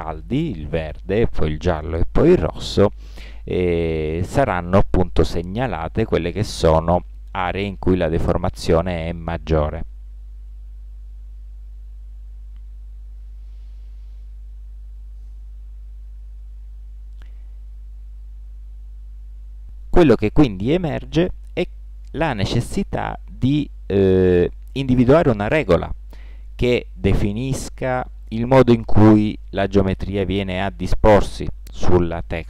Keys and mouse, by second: 24.8 middle click.